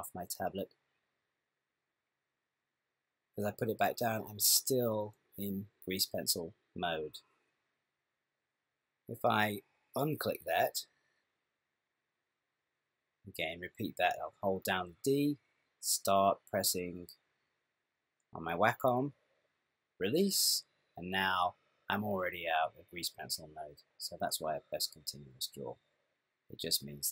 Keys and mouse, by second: 11.9 click, 14.9-16.9 d, 16.9 click, 19.1 d, 20.0 d, 21.3 click, 23.3 middle click.